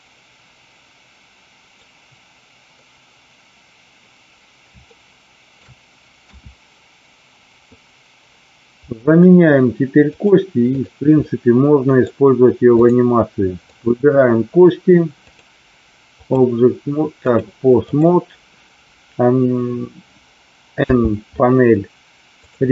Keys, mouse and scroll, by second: 4.9-5.6 shift+middle drag, 6.2 KP_1, 9.0 middle click, 10.1 click, 11.2 middle click, 12.7 click, 13.6 click, 15.3-16.3 drag, 17.3 click, 20.7 n, 22.3 click.